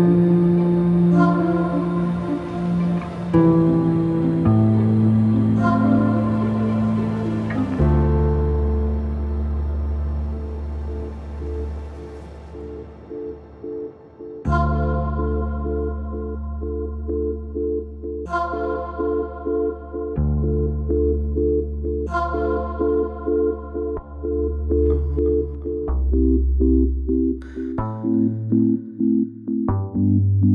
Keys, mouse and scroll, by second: 1.2 click, 2.5 click, 4.0 g, 5.6-6.7 drag, 6.7 KP_0, 9.4 click, 10.1 click, 11.3-11.9 scroll up 1, 11.9-13.8 scroll up 1, 14.5 click, 15.4 r, 19.9 click, 25.3 click, 26.5 click, 27.2 click, 28.5 click, 29.0 click, 30.1-30.5 drag.